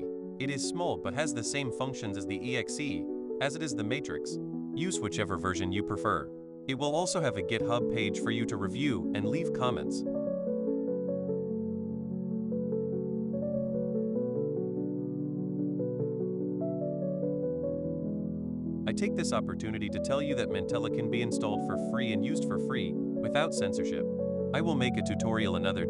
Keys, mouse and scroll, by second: 2.0 right click, 3.1 click, 4.9 click, 9.0 click, 9.7 click, 13.3 click, 13.5 click, 15.8-18.2 drag, 19.1 click, 20.9 click, 22.0 click, 22.9 click, 23.9 click, 25.1 click.